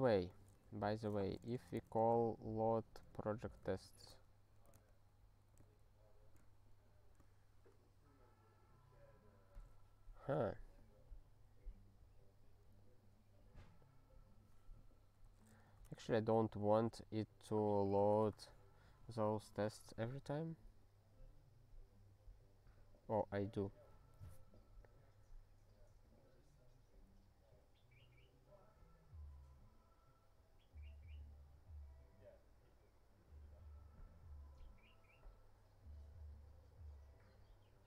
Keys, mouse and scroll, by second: 0.3 click, 0.3 click, 0.9 Return, 0.9-3.8 typing, 10.7-11.2 scroll up 3, 12.0-12.4 scroll up 1, 15.3 click, 15.5 click, 16.7 ctrl+s, 21.8-24.2 scroll down 3, 24.3-26.1 scroll down 1, 26.4-26.7 scroll down 3, 29.6-36.7 scroll down 1, 36.9-37.4 scroll down 1, 37.5-37.8 scroll down 2.